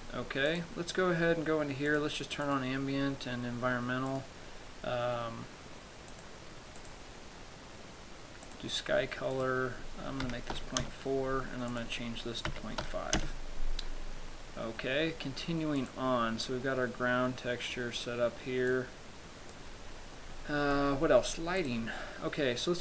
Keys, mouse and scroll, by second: 0.8 click, 0.8-1.2 scroll up 2, 1.5 scroll down 3, 2.2 click, 2.9 click, 4.4 click, 7.0 click, 9.6 click, 12.0 click, 16.0 click, 19.0 click, 21.0 middle click, 21.9 right click.